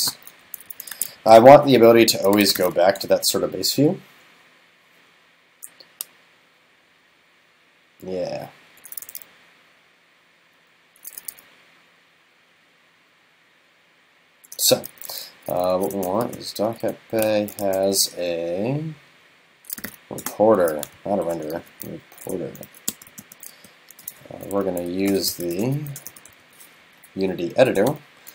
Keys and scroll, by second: 0.7 super+Left, 1.2 super+Right, 21.1 alt+shift+Left, 24.4 super+Up.